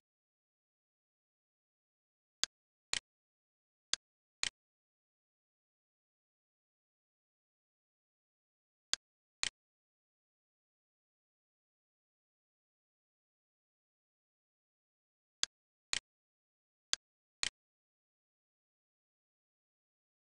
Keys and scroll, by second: 5.6-7.4 typing, 7.4 Return, 11.8 Return, 14.8 r, 19.5 l.